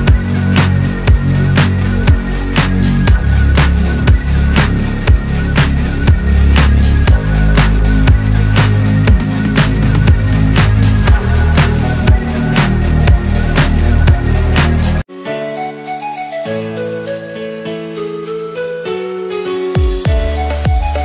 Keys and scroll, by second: 5.7 ctrl+KP_0.